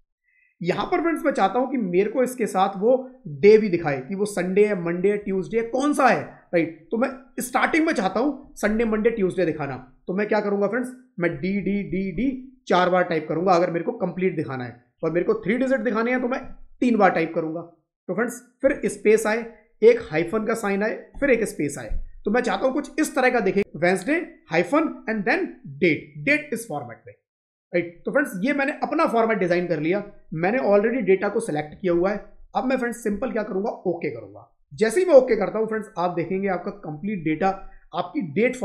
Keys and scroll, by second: 18.5 space, 21.0 space.